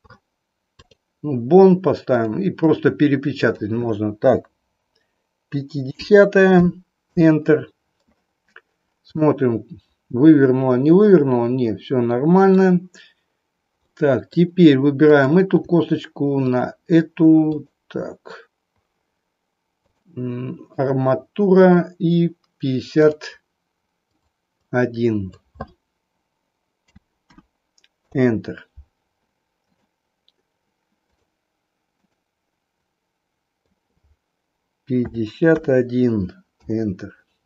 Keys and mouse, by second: 2.1-8.1 drag, 9.4-12.6 middle drag, 13.9 middle click, 15.0 click, 16.4 shift+click, 17.4 click, 19.9-20.9 drag, 21.6-23.2 drag, 24.0-28.2 drag, 29.7-31.2 drag, 31.9-37.4 drag.